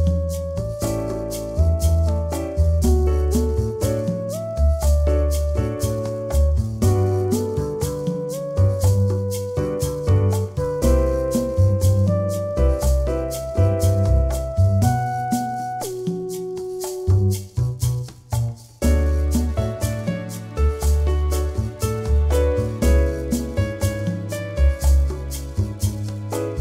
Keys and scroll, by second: 23.3 Return, 25.0 Return.